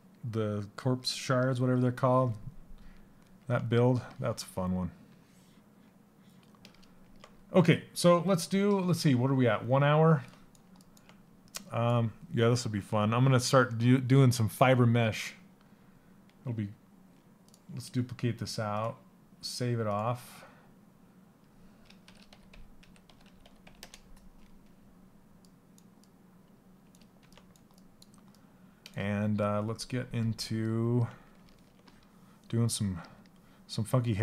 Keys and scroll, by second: 22.1-23.7 typing.